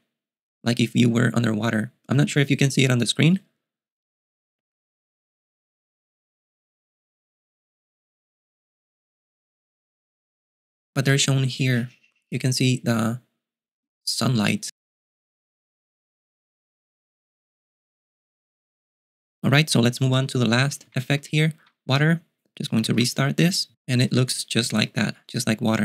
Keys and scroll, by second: 20.6-21.7 typing, 23.2 super+q.